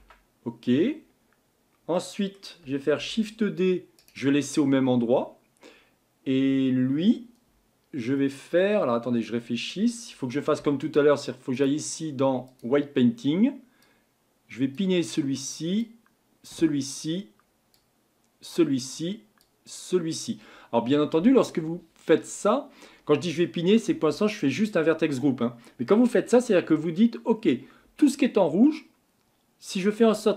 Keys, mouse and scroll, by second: 0.0 Tab, 0.7 Tab, 1.0-1.9 scroll up 4, 1.9-3.0 middle drag, 3.0 shift+d, 8.2-11.5 middle drag, 11.5-30.3 drag.